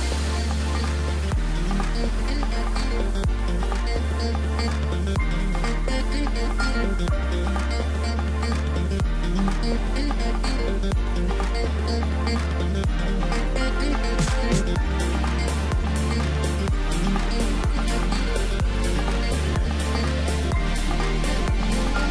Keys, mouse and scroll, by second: 0.2 Tab, 0.6 scroll down 2, 0.8-2.4 middle drag, 2.4 KP_7, 6.5 ctrl+r, 10.6 ctrl+b, 14.3 Tab, 15.5 g, 17.9 scroll up 3, 18.1 scroll down 4, 18.3-21.4 middle drag, 21.8-22.1 scroll up 1.